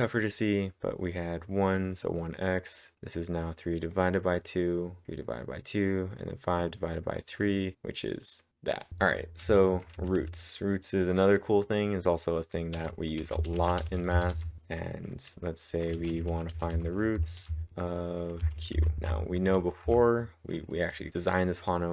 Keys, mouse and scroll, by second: 1.7 Up, 2.7-3.9 drag, 3.9 click, 4.7 scroll up 1, 5.7-7.0 scroll down 1, 7.4-12.3 drag, 8.9-10.7 typing, 12.7-14.3 drag, 12.7-19.5 typing, 19.8 Up.